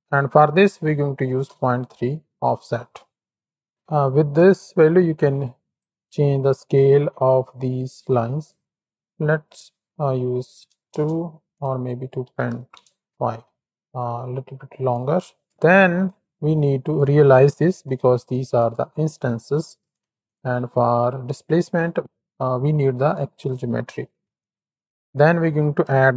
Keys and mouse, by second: 4.1-5.7 shift+drag, 6.4 middle click, 7.1 shift+middle click, 8.4-10.9 drag, 11.6-12.7 drag, 13.6-14.0 middle drag, 14.3-14.9 middle drag, 15.1 shift+click, 15.5 click, 16.6-19.9 drag, 20.2 alt+shift+click, 20.6 click, 21.3 click, 24.2 shift+a.